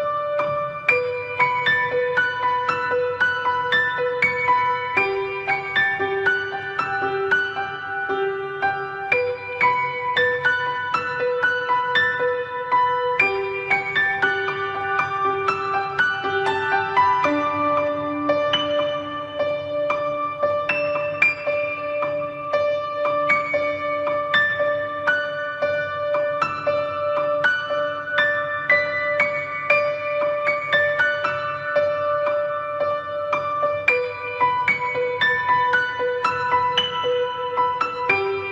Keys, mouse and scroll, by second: 0.8 ctrl+click, 1.0 middle click, 1.5 ctrl+click, 1.8 ctrl+click, 2.1 ctrl+click, 2.5 ctrl+click, 2.8 ctrl+click, 3.0 ctrl+click, 3.4 ctrl+click, 3.5 f, 3.8 ctrl+click, 4.2 ctrl+click, 4.5 ctrl+click, 4.6 ctrl+click, 4.8 ctrl+click, 5.1 ctrl+click, 5.5 ctrl+click, 6.3 ctrl+click, 6.4 middle click, 6.7 f, 7.0 middle click, 7.3 ctrl+middle click, 7.8 middle click, 8.2 ctrl+middle click, 8.5 middle click, 8.9 ctrl+Tab, 13.5 click, 15.0 middle click, 15.7 click, 16.7-17.2 scroll up 3, 17.0 middle click, 17.3 middle click, 18.2 middle click, 18.9 click, 23.5 middle click, 23.8 middle click, 24.1 middle click, 24.5 scroll down 3, 24.7 shift+middle click, 24.9 shift+middle click, 25.0-26.0 scroll up 3, 25.3 middle click, 26.0 middle click, 26.2 shift+middle click, 26.9 middle click, 26.9-27.5 scroll down 2, 27.9-28.3 scroll up 2, 28.3 middle click, 29.0 middle click, 29.7 scroll down 1, 30.0 middle click, 31.1 click, 33.4 shift+middle click, 33.8 scroll up 2, 34.0 middle click, 34.4 middle click, 34.7 shift+middle click, 36.7 middle click, 36.7 shift+middle click, 36.9 shift+middle click, 37.8 right click, 38.1 ctrl+Tab.